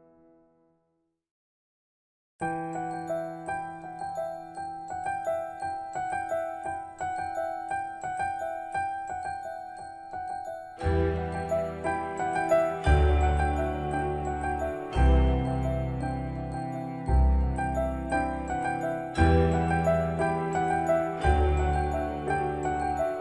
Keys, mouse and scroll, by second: 1.7 typing, 3.1 typing, 3.1 Return, 4.7 shift+middle click, 9.9-10.4 scroll up 1, 10.4 middle click, 10.7-11.5 scroll up 1, 12.4 c, 16.2 click, 17.6 Escape, 20.2 click, 21.4 typing.